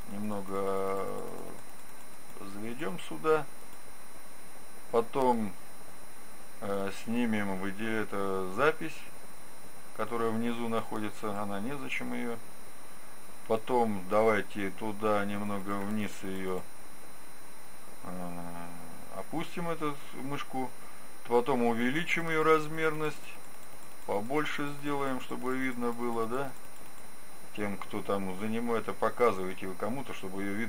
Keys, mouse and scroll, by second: 0.4-13.1 drag, 15.4-18.4 drag, 21.9-28.6 drag.